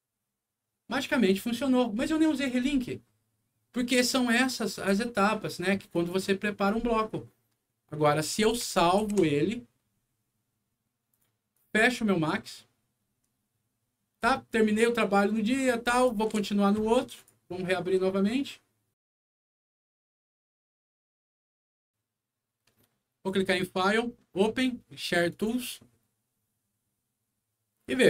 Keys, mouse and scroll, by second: 1.3 click, 5.9 click, 8.1 click, 8.4 click, 9.0 ctrl+s, 11.1 ctrl+click, 11.5 ctrl+click, 16.0 click, 17.1 click, 19.3 click, 23.2 click, 25.3 click.